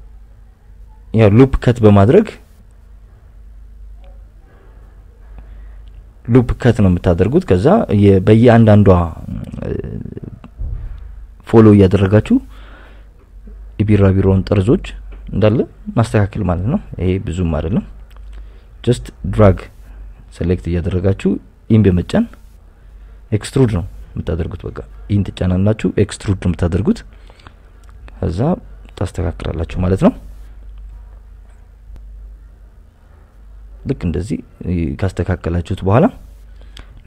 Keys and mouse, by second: 0.0 y, 0.7 click, 0.9 click, 1.4 g, 1.5 x, 2.3 click, 3.1 click, 3.4 g, 3.6 x, 4.6 click, 5.2 right click, 5.5 g, 5.7 y, 6.9 click, 7.7 e, 7.8 x, 8.9 e, 9.2 x, 10.0 click, 10.5 s, 10.6 y, 11.4 click, 12.1 e, 12.3 x, 13.2 click, 13.6 g, 13.8 y, 14.3 click, 14.6 click, 15.0 g, 15.1 y, 16.3 click, 16.6 e, 16.8 x, 17.4 g, 17.6 y, 18.7 click, 19.1 click, 19.4 g, 19.6 y, 20.7 right click, 21.2 ctrl+z, 21.5 click, 22.2 e, 23.0 x, 24.2 click, 24.3 g, 24.6 y, 25.1 click, 25.4 click, 25.8 g, 25.9 y, 26.4 click, 26.8 click, 27.4 e, 27.6 x, 29.0 click, 29.6 s, 29.8 y, 30.7 click, 30.9 g, 31.0 y, 32.7 click, 33.0 g, 33.1 y, 33.8 click, 34.5 click, 34.9 e, 35.0 x, 35.7 click, 36.0 click, 36.2 g, 36.4 y.